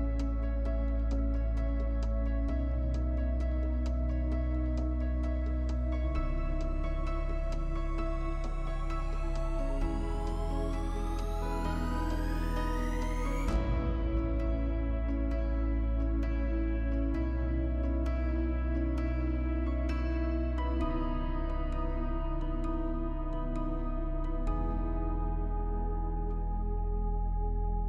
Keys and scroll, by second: 7.1 space.